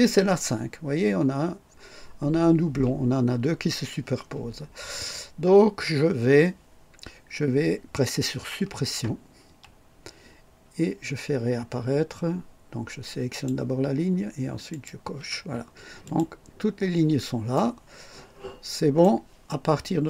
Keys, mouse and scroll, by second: 9.4 Delete, 13.2 click, 14.6 click, 16.0 click, 16.9 scroll down 2, 17.5-19.2 right drag.